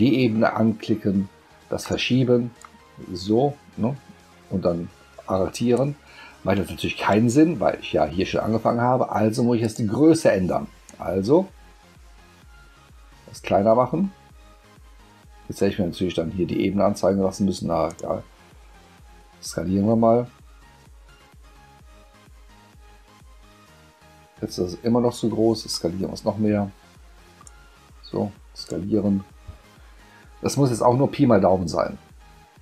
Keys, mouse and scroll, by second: 1.8 click, 2.6-5.7 drag, 9.6 click, 10.9-15.6 drag, 17.9 click, 25.7-27.4 drag, 28.6 click.